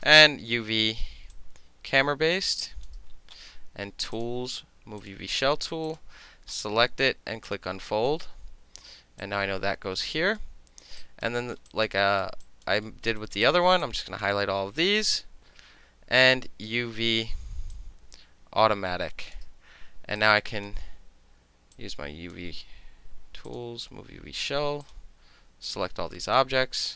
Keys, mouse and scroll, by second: 0.1 space, 1.3-2.8 drag, 4.1 click, 5.0 click, 5.9 click, 7.4 click, 8.1 alt+middle click, 9.2-10.4 drag, 11.0 alt+click, 11.4 alt+right click, 11.7 alt+click, 12.0 alt+middle click, 12.4 alt+middle click, 12.5 alt+click, 12.7 alt+middle click, 13.1 alt+middle click, 13.2 alt+right click, 13.4 alt+middle click, 13.5 alt+click, 13.6 alt+middle click, 13.8 alt+click, 14.2-17.7 middle drag, 16.5 space, 17.7-19.4 drag, 19.4 middle click, 20.2-20.7 drag, 21.8-22.3 drag, 23.5 click, 24.9 click, 25.7-26.4 drag.